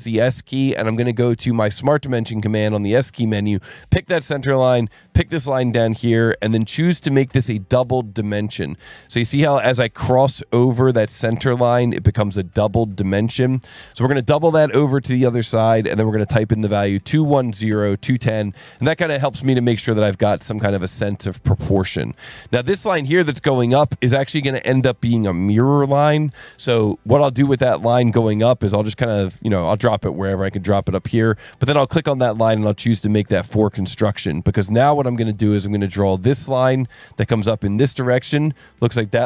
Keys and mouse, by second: 1.5 click, 3.4 click, 4.9 click, 14.0 click, 16.7 KP_2, 17.0 KP_1, 17.1 KP_0, 17.7 KP_Enter, 20.2 Escape, 22.3 click, 31.9 click, 33.2 click, 34.7 s, 35.4 click, 36.7 click.